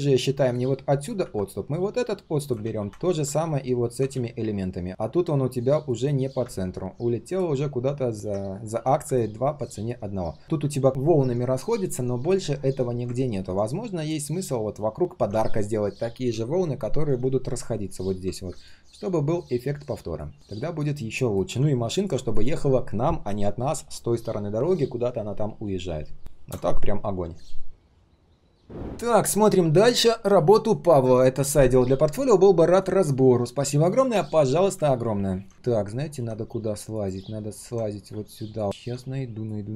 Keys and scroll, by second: 2.6 ctrl+z, 4.1 ctrl+z, 4.6 ctrl+z, 4.7 ctrl+z, 35.5 ctrl+shift+3.